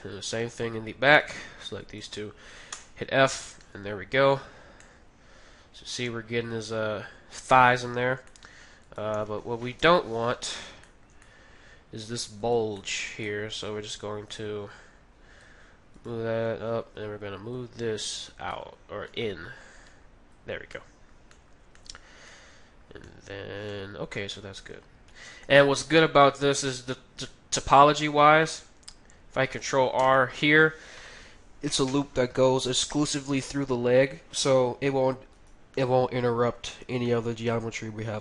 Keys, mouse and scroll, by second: 2.7 f, 3.0 middle click, 3.4 Tab, 3.6-6.8 middle drag, 7.5 Tab, 7.7-10.3 middle drag, 8.8-10.5 right drag, 9.8 KP_3, 10.3-14.3 middle drag, 12.4-14.3 right drag, 14.8-16.2 drag, 14.8 middle click, 16.0-17.7 right drag, 17.5-19.7 drag, 20.7-31.4 middle drag, 29.9 ctrl+r, 35.4-38.2 right drag, 35.8-38.2 middle drag.